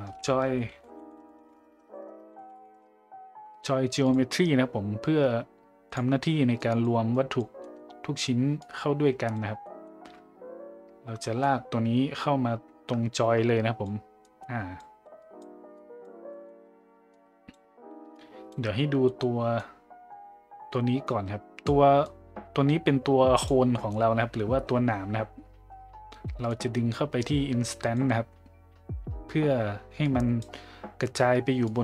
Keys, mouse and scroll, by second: 1.6 BackSpace, 1.8 BackSpace, 2.1 BackSpace, 6.6 click, 7.2-7.5 drag, 7.7 middle click, 8.6 click, 9.6 middle click, 11.5-13.8 drag, 14.2-14.8 drag, 15.2 click, 15.8 click, 16.3 middle click, 17.1-17.6 drag, 18.2 click, 19.0 middle click, 19.6-21.6 drag, 22.1-23.5 drag, 23.8 middle click, 26.5-27.9 drag, 30.0 click, 31.7 click.